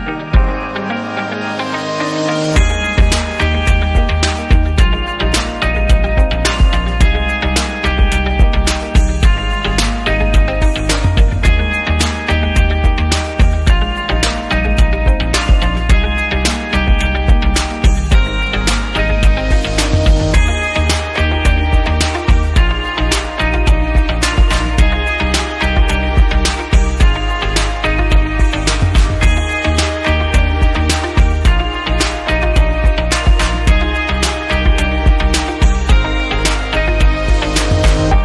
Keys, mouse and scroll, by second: 0.3 click, 2.2 click, 3.3 click, 4.5 click, 6.1 click, 8.4 click, 9.3 click, 10.4 click, 11.5 click, 14.2 click, 15.0-16.6 typing, 16.0 Right, 18.5 click, 19.1 double click, 20.7 shift+click, 26.1 shift+click, 27.5 click, 28.5 click, 29.4 click, 31.5 click, 33.0 click, 38.0 click.